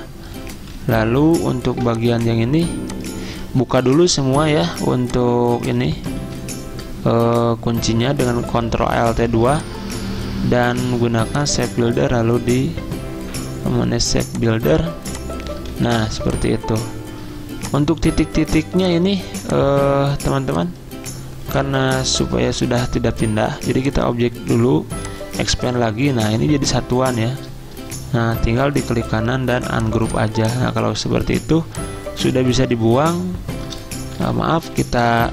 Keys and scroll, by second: 1.7 v, 3.9 ctrl+alt+2, 6.2 ctrl+z, 15.9 v, 21.4 ctrl+z, 34.2 ctrl+shift+g, 34.4 ctrl+shift+g, 34.4 ctrl+shift+g, 34.6 ctrl+shift+g.